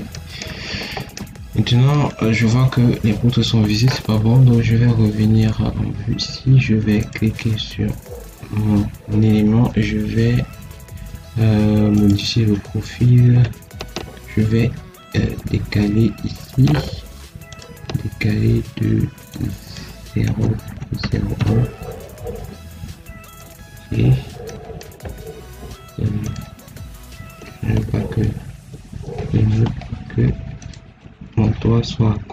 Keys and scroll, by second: 20.2 0, 20.6 ., 20.9 0, 27.8 Escape, 31.2 ctrl+x.